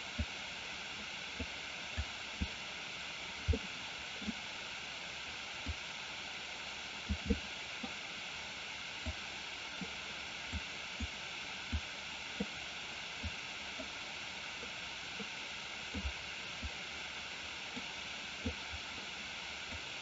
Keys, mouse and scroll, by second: 0.3-1.4 drag, 2.2 click, 3.7 middle click, 5.8-7.1 drag, 7.3 middle click, 9.2 click, 10.5 click, 11.8 click, 13.4 click, 16.0 click, 17.9 click, 19.8-20.0 drag.